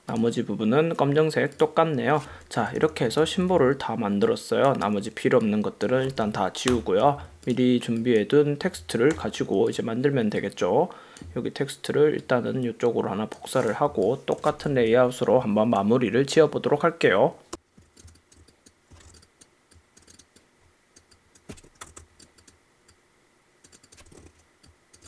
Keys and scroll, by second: 2.7 super+-, 3.3 v, 6.8 BackSpace, 7.1 v, 9.5 super+g, 14.0 space, 14.9 super+0, 18.1 space, 19.2 shift+super+g, 21.7 shift+Right, 21.8 Left, 24.1 Right.